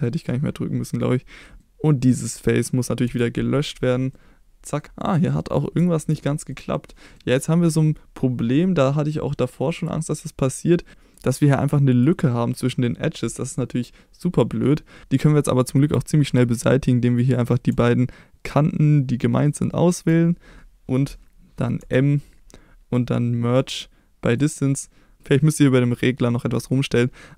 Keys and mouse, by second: 0.0 middle click, 2.1 click, 3.0 x, 4.2 middle click, 5.1 middle click, 5.8 shift+middle click, 6.5 middle click, 6.9 middle click, 9.8 click, 11.0 middle click, 12.0-14.6 drag, 14.9 middle click, 17.2 click, 19.5 shift+click, 21.8 m, 25.2-27.3 drag.